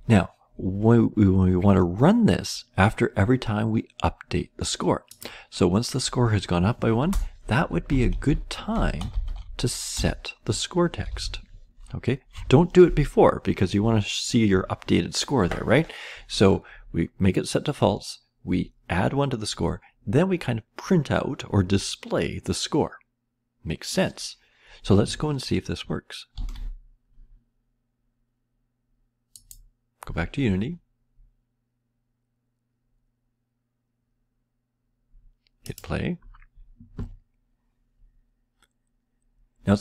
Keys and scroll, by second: 3.0 typing, 7.0 Return, 7.6-12.7 typing, 9.9 Return, 26.3 ctrl+s.